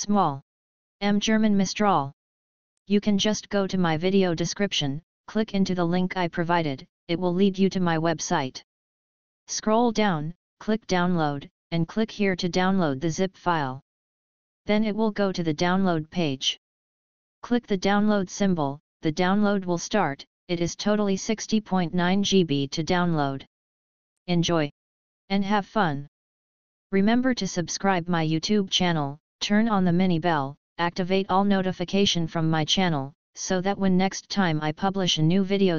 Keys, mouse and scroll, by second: 2.7-9.0 drag, 9.0-13.8 scroll down 24, 13.8-14.3 scroll down 1, 14.3-15.1 scroll down 1, 15.1-16.2 drag, 16.8 click, 17.5 click, 20.6 click, 26.1-27.5 scroll down 5, 28.0 scroll down 1, 28.0 click, 31.4 click.